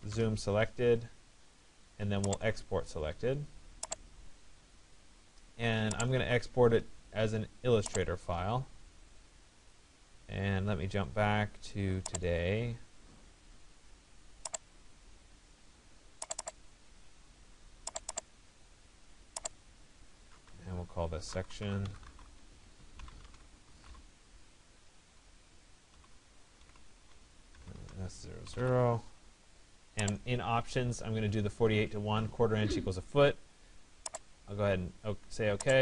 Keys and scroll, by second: 24.6 BackSpace.